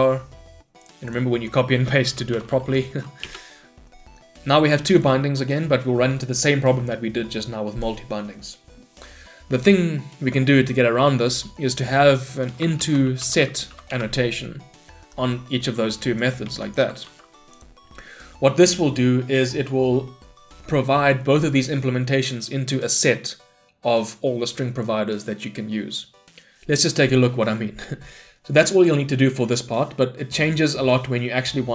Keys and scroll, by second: 3.3 Return, 14.0 Return, 16.6 ctrl+c, 17.1 ctrl+v.